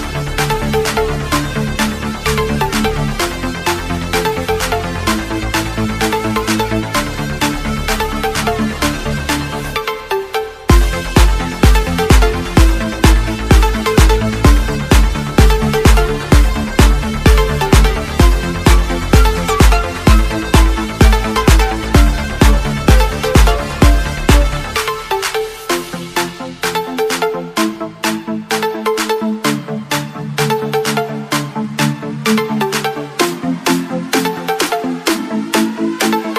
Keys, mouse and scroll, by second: 0.0-0.4 alt+scroll down 3, 0.7-1.3 alt+scroll up 3, 1.6 click, 2.8 alt+Tab, 3.8 click, 5.3-7.7 typing, 6.4 click, 7.6 click, 8.6 alt+Tab, 9.0 alt+click, 9.4 v, 9.8 click, 10.0 Right, 10.6 z, 10.7 click, 11.6 scroll up 1, 12.0 click, 14.2 scroll up 1, 15.1 ctrl+t, 15.4 click, 17.6 Return, 17.9 scroll down 1, 18.4 click, 18.8 scroll up 1, 19.8 click, 20.6 scroll up 1, 20.9 click, 21.5 scroll down 1, 21.9 scroll up 1, 22.8 scroll up 1, 23.2 click, 24.2 Right, 24.4 Left, 24.6 scroll up 1, 24.8 scroll down 1, 25.2 z, 25.7 click, 26.8 right click, 28.8 click, 31.3 v, 31.6 click, 33.0 t, 33.2 click, 35.2 scroll down 1, 35.8 click.